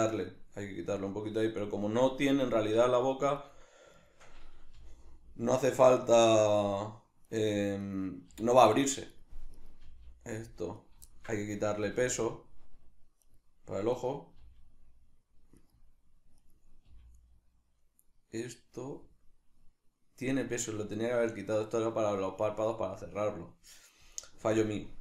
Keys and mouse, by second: 0.2 right click, 3.4 right click, 4.0 shift+right click, 4.8 g, 7.3 right click, 7.9 right click, 8.3 g, 9.6 right click, 9.8 g, 10.9 right click, 11.1-13.3 shift+middle drag, 11.8 g, 13.3 right click, 14.0 right click, 14.3 g, 15.7 right click, 16.5 right click, 16.9 g, 20.4 right click, 22.4-25.0 middle drag, 24.4 g.